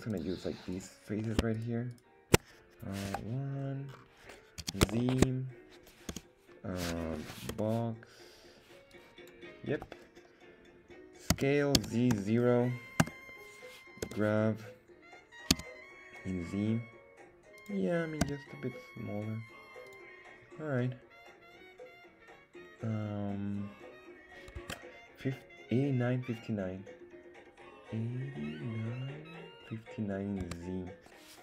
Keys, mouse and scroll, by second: 0.7 right click, 1.5 shift+right click, 1.9 shift+right click, 3.0 KP_1, 3.6 scroll down 2, 3.9-5.1 scroll up 2, 5.1 z, 5.1 shift+middle click, 6.1 c, 7.5 b, 9.7 Escape, 11.3 s, 11.8 z, 12.1 KP_0, 13.0 Return, 14.0 g, 15.5 z, 17.6 click, 18.2 s, 19.9 click, 24.6 Tab, 30.4 Tab.